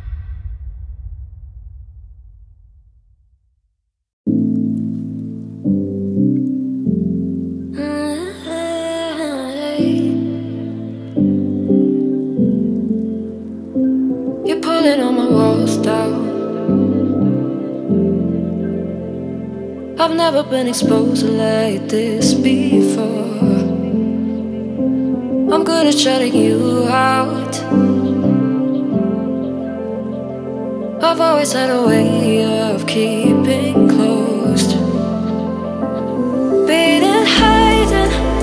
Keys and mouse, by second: 0.1 click, 0.8 click, 2.4 Tab, 3.0 middle click, 4.2 Tab, 5.7 Tab, 6.1 middle click, 6.6 middle click, 7.0 click, 8.7-10.1 middle drag, 12.6 Tab, 13.7 ctrl+i, 14.8 click, 15.4 click, 16.0-17.0 middle drag, 19.0 Tab, 19.4 middle click, 20.2 Tab, 21.4 click, 22.0-23.4 drag, 24.8 middle click, 26.0 ctrl+middle click, 26.4 middle click, 27.7 click, 30.1 click, 30.6 middle click, 31.7 ctrl+middle click, 34.1 middle click, 34.2 click, 34.8 shift+middle click, 35.7 click, 36.7 click, 37.1-38.3 middle drag.